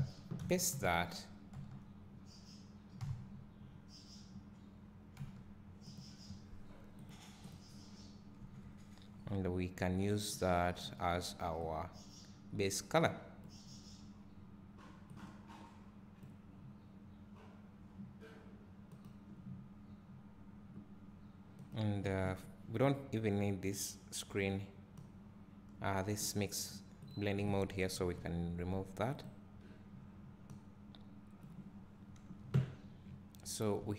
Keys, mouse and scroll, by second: 0.5 ctrl+v, 7.5 click, 9.1 Delete, 10.7-19.4 drag, 21.6-22.3 drag, 25.7-29.1 drag, 29.1 Delete, 32.0-32.6 scroll up 1, 33.8 `.